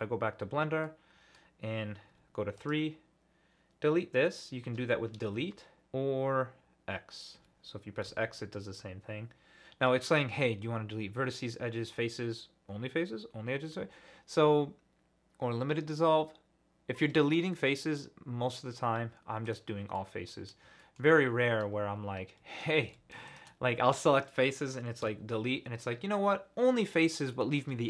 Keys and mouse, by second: 0.8 middle click, 2.1 3, 2.6 click, 5.3 Delete, 8.1 x, 19.9 middle click, 20.8 shift+middle click, 22.9 ctrl+z, 23.3 shift+middle click, 25.0 x, 27.3 click.